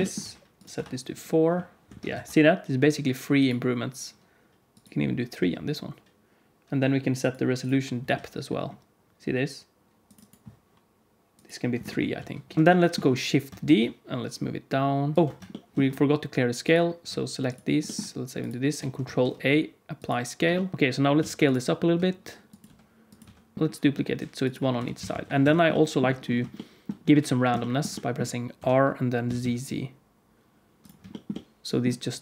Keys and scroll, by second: 1.8 alt+a, 2.1 ctrl+s, 2.7 z, 5.3 z, 12.1 z, 12.5 alt+a, 12.5 shift+KP_1, 13.6 shift+d, 15.1 alt+s, 15.1 ctrl+z, 19.0 ctrl+a, 20.7 alt+a, 21.1 alt+a, 21.8-23.5 typing, 24.7 r, 28.5 r, 32.1 alt+a.